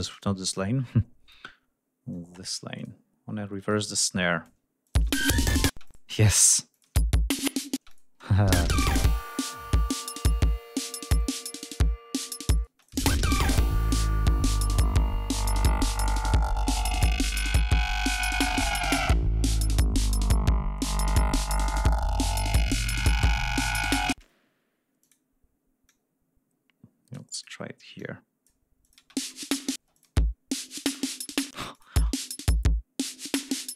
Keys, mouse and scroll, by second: 0.4 shift+click, 2.1 click, 2.7 click, 3.7 click, 4.8 click, 4.9 space, 5.6 space, 5.8 click, 6.7 click, 6.8 space, 7.7 space, 7.8 click, 8.2 ctrl+scroll down 2, 8.4 space, 9.8 ctrl+scroll down 2, 10.1 ctrl+scroll up 2, 12.6 space, 12.8 click, 14.3 ctrl+scroll down 2, 14.6 ctrl+scroll up 2, 15.2 ctrl+scroll down 2, 15.6 ctrl+scroll up 2, 17.4 ctrl+scroll up 2, 18.8 ctrl+scroll down 2, 19.5 ctrl+scroll down 2, 20.3 ctrl+scroll up 2, 22.0 ctrl+scroll down 2, 22.2 ctrl+scroll up 2, 23.1 ctrl+scroll up 2, 24.1 space, 25.0 click, 25.8-27.6 drag, 27.9 click, 28.8 click, 28.9 space, 29.7 space, 29.9 click, 31.2 space, 31.7 click, 31.9 space, 32.3 ctrl+scroll down 2.